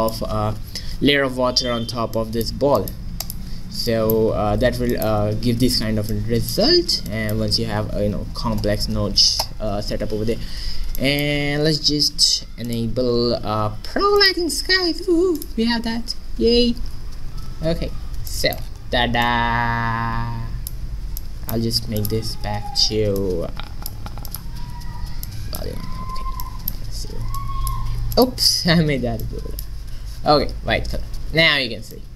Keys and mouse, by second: 3.3-5.2 drag, 6.8-8.9 middle drag, 11.1-12.7 middle drag, 12.7-17.2 drag, 17.4 middle click, 22.0-23.8 drag, 26.5-30.1 drag, 30.8-32.1 middle drag.